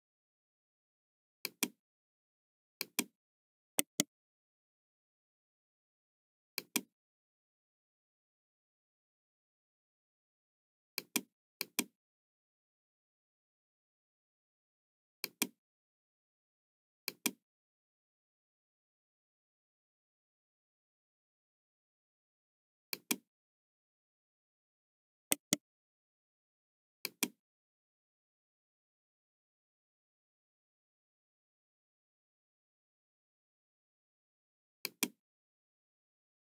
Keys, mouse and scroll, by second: 1.3 click, 2.7 click, 3.7 right click, 4.8 middle click, 6.5 click, 9.4 KP_6, 10.8 click, 11.5 click, 12.1 KP_6, 12.8 Return, 12.8 middle click, 15.2 click, 16.9 click, 19.9 KP_3, 20.4 Return, 22.8 click, 25.3 right click, 26.9 click, 28.6 scroll down 1, 29.3-30.5 middle drag, 34.7 click, 36.3 scroll up 2.